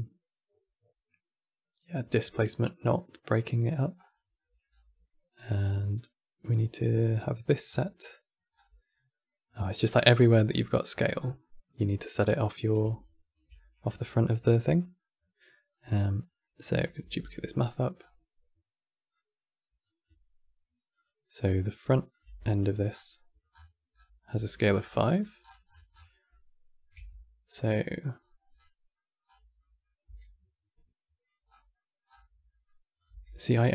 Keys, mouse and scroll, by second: 2.7 middle click, 3.6-5.2 scroll up 16, 4.1 middle click, 7.4 scroll down 8, 7.6 middle click, 8.3 scroll up 7, 8.6-10.1 middle drag, 10.1 scroll down 5, 10.4-10.9 middle drag, 10.9 scroll down 6, 11.1-15.4 middle drag, 15.4-15.8 scroll up 2, 16.0 middle click, 16.4 click, 16.9 shift+d, 17.2-17.7 middle drag, 17.7 scroll up 7, 18.9 click, 20.7 click, 21.8 click, 21.9 Tab, 22.6 scroll down 10, 22.8 middle click, 23.2-23.8 scroll up 21, 24.1 Tab, 24.4-24.8 scroll down 8, 24.8 click, 25.1-25.9 scroll down 29, 25.9 middle click, 26.7 g, 28.3 scroll up 9, 28.7 middle click, 29.0 scroll up 8, 29.3 middle click, 29.8 g, 31.2-32.2 scroll up 18, 31.4 middle click, 32.2 middle click, 32.7 click, 32.8 g.